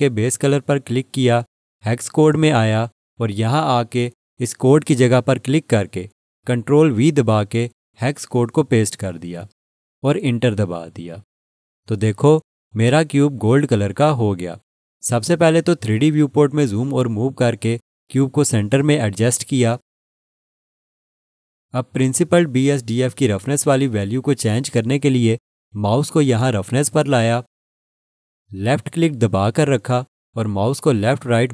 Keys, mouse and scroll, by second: 7.3 ctrl+v, 10.7 Return, 17.1 click, 19.8-20.1 scroll, 20.3 alt+shift+click, 29.0 click.